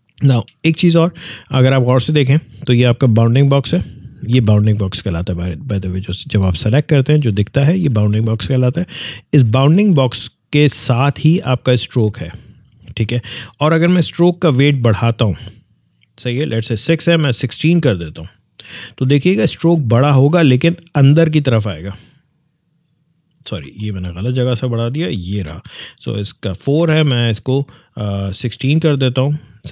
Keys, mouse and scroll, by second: 1.9 click, 14.4-17.3 drag, 17.3-17.9 typing, 20.4 Tab, 23.4 ctrl+Tab, 23.5 ctrl+z, 24.4 click, 26.8 1, 28.5 6.